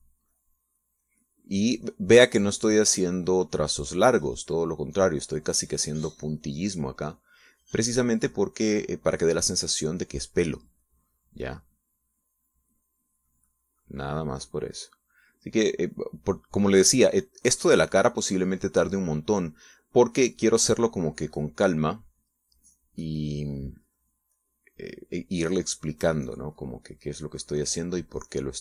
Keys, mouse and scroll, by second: 11.3 middle click, 12.1-16.8 drag, 16.9-21.8 drag, 21.9 middle click, 22.6-23.8 drag, 23.9 middle click, 24.3 click, 27.1 middle click, 27.5 click, 28.2 middle click.